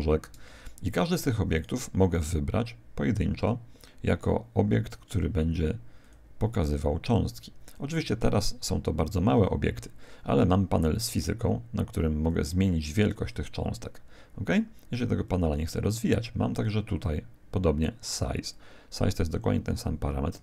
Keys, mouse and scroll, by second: 1.5 right click, 3.3 click, 11.1-13.9 drag, 13.9 click, 15.3 click, 16.9 click, 18.5 click.